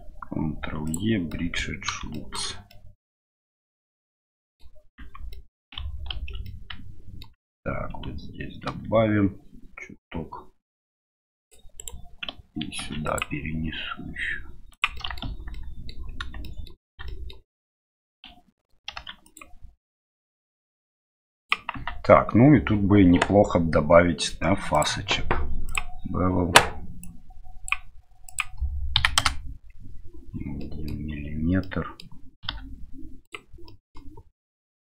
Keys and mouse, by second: 1.4 middle click, 2.2 shift+middle click, 2.8 middle click, 4.3 middle click, 5.0 Tab, 5.3-6.3 middle drag, 6.4-7.2 middle drag, 8.6 ctrl+r, 14.9 middle click, 15.2 Tab, 15.5 middle click, 16.4 middle click, 17.0 middle click, 18.9 ctrl+r, 21.7 Tab, 24.8-25.8 drag, 27.0 click, 28.3-29.8 drag, 30.6-30.9 middle drag, 31.6-32.0 middle drag, 32.4 q, 33.6 middle click, 34.6 middle drag.